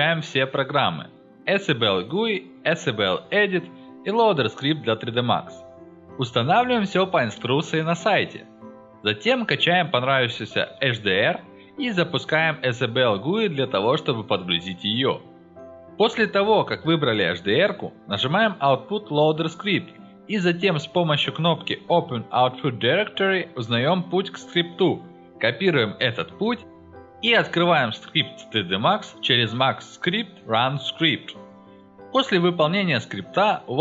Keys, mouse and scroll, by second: 4.1-4.4 scroll down 1, 8.3 scroll up 1, 8.8-9.8 scroll down 2, 10.4 scroll up 2, 10.5 scroll down 2, 11.2-12.1 scroll down 4, 12.7 scroll up 2, 13.9 middle click, 14.0-14.6 middle drag, 17.7 click, 19.9 click, 22.7 click, 24.0 click, 24.9 click, 26.0 click, 26.9 click, 30.9 click, 31.0 click.